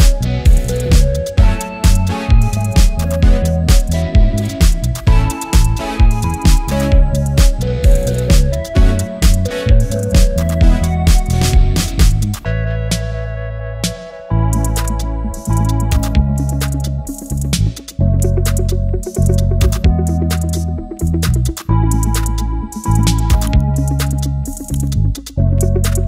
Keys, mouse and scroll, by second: 0.1 click, 1.1-4.5 drag, 8.8 Return, 9.7 right click, 10.9 click, 14.6 click, 14.9 ctrl+t, 15.5-18.2 drag, 18.2 Return, 20.0 click, 22.4 alt+scroll up 1, 23.3 click, 24.0 alt+scroll down 1, 25.4 click.